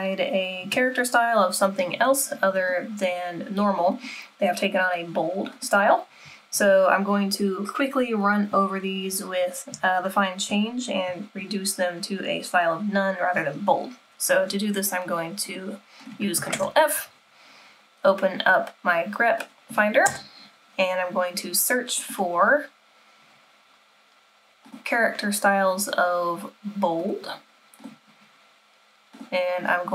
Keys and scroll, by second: 16.5 ctrl+f, 20.1 BackSpace.